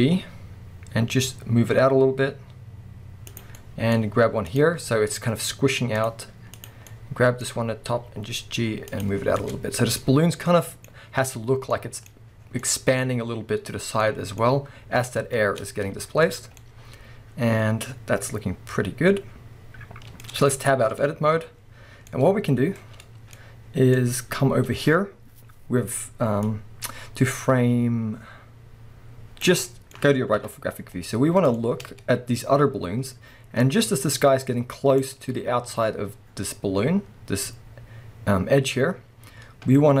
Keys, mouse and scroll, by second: 3.4 click, 3.8 middle click, 4.5 click, 6.7 click, 6.9 middle click, 9.1 click, 9.2 scroll down 1, 9.9 middle click, 10.1-10.5 scroll up 2, 11.4 Tab, 11.7 middle click, 12.4 scroll down 2, 12.6 middle click, 14.1-15.3 middle drag, 14.4-15.3 scroll up 2, 15.7-16.3 middle drag, 16.3-16.6 scroll down 1, 18.8-25.5 middle drag, 20.6 Tab, 21.1-21.6 scroll down 2, 21.6-22.1 scroll down 1, 22.8-23.3 scroll down 2, 23.3 scroll down 1, 24.0-25.5 scroll up 2, 26.5-29.7 drag, 29.7-33.6 middle drag, 30.4 KP_3, 30.9-31.6 scroll up 2, 31.9-33.0 scroll up 2, 33.0-33.6 scroll up 1, 33.6-40.0 drag, 35.2-37.6 scroll down 2, 37.6-39.3 scroll down 1.